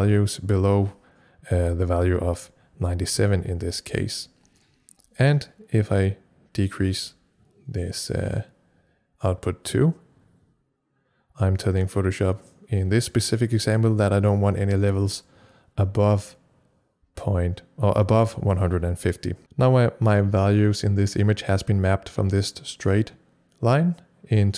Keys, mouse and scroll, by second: 5.9-15.2 drag.